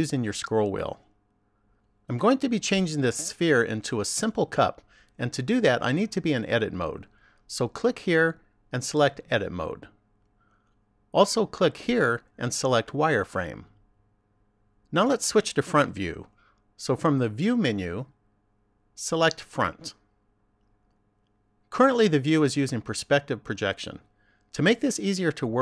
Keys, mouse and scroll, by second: 7.8 click, 9.8 click, 11.7 click, 14.8 click, 17.3 click.